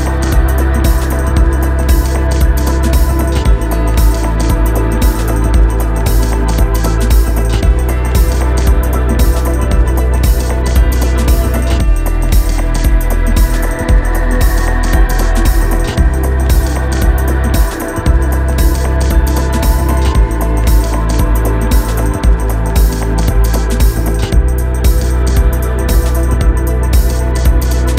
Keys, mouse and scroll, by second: 3.6 ctrl+space, 3.9 ctrl+space, 4.3 ctrl+click, 4.9 ctrl+space, 6.1 click, 12.7 click, 16.9 click, 24.4-26.6 drag.